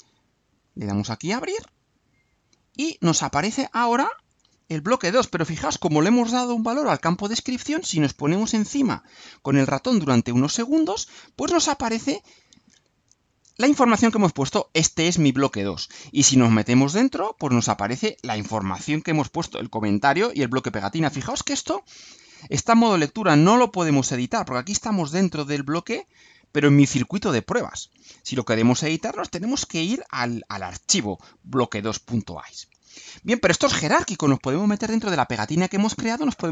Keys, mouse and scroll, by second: 0.0-0.8 alt+drag, 1.5 click, 4.3 click, 16.3 click, 23.1-23.7 drag, 29.7 click, 32.9 click, 35.3 click.